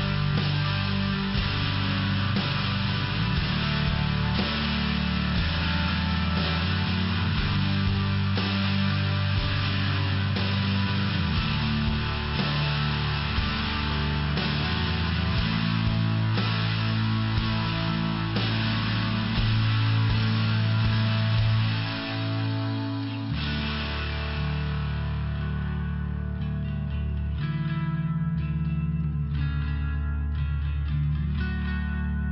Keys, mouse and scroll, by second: 0.3 double click, 0.8 click, 2.0 click, 2.8 click, 3.3 click, 3.8 click, 4.4 click, 6.2 click, 8.1 click, 8.8 click, 9.3 click, 10.1 click, 10.9 click, 11.6 click, 11.7 click, 12.2 click, 12.4 click, 12.8 click, 12.9 click, 13.3 click, 13.5 click, 14.0 click, 14.1 click, 14.6 click, 16.0 click, 16.7 click, 18.8 click, 18.9 click, 19.0 click, 19.1 click, 23.3 click, 24.9 click, 25.1 click, 26.2 click, 26.3 click, 26.4 click, 26.9 click, 27.1 click, 29.0 click, 29.2 click, 30.7 click, 30.8 click.